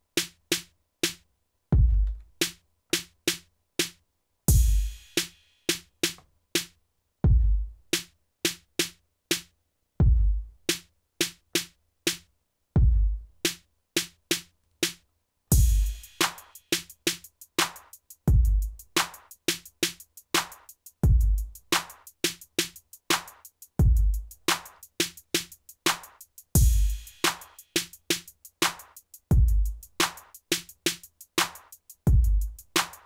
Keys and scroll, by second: 2.1 ctrl+s.